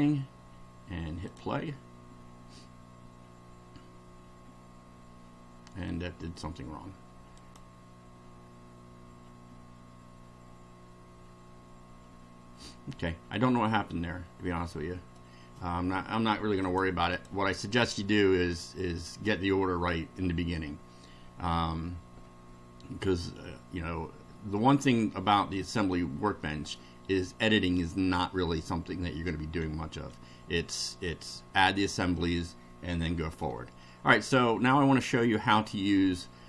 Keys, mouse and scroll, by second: 1.3 click, 5.8-6.5 middle drag, 7.4 click, 12.6-15.4 middle drag, 16.6 click, 17.2 click, 24.5-25.7 middle drag, 26.4 middle click, 27.7-28.7 middle drag, 32.1-33.6 middle drag, 33.8-34.5 middle drag.